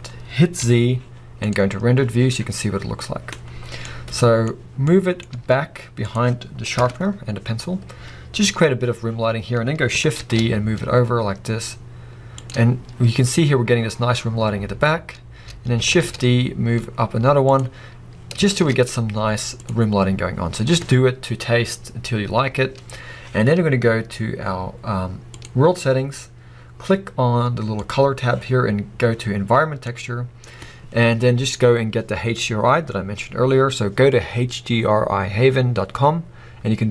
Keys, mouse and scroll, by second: 0.6 z, 2.1 scroll up 1, 3.6-3.9 scroll down 1, 3.9-6.2 middle drag, 5.3 g, 6.2 click, 6.8 KP_0, 8.5 scroll up 1, 9.4-10.3 scroll down 1, 10.3 shift+d, 12.6 click, 13.3 scroll up 1, 14.2 scroll down 1, 15.9 shift+d, 17.6 click, 18.6 shift+d, 19.7 click, 20.5 scroll up 1, 25.3-27.3 drag, 27.7-36.9 drag.